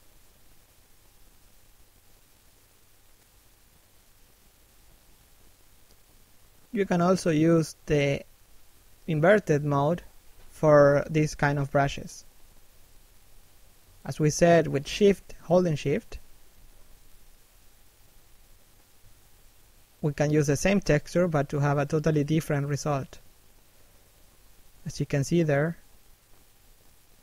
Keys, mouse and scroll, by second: 1.1 shift+middle click, 3.0 f, 4.2 right click, 5.9 shift+middle click, 7.1 click, 8.9 middle click, 10.0 shift+middle click, 11.5 shift+a, 11.7 middle click, 12.2 shift+middle click, 12.9 click, 18.8 middle click, 19.7 scroll down 1, 20.1 middle click, 21.5 shift+middle click, 21.9-22.4 scroll up 1, 22.4 click, 25.0 shift+a, 25.4 click.